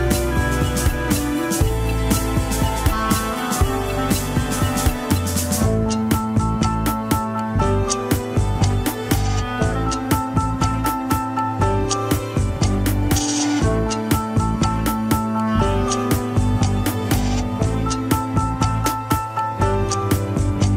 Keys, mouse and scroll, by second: 0.5-1.4 scroll down 1, 1.4 f, 2.0-4.4 drag, 4.4 middle click, 5.2-6.8 drag, 6.8 middle click, 7.6-8.1 scroll up 2, 8.1-9.3 drag, 9.3 scroll down 3, 9.3 middle click, 9.9 click, 10.8 middle click, 11.5-12.5 drag, 12.5-14.5 middle drag, 14.5-14.9 scroll down 1, 14.9 click, 15.5 middle click, 15.7 scroll down 1, 16.1-18.0 drag, 18.0 middle click, 18.4 shift+z, 18.7 scroll up 1, 19.0 shift+z, 20.1-20.7 drag.